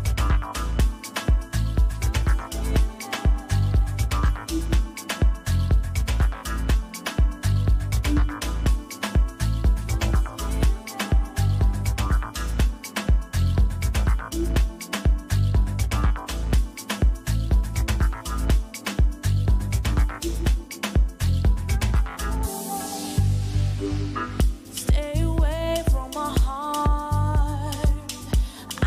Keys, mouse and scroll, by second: 0.0-3.6 typing, 4.3 Return, 6.7 click, 26.8 click.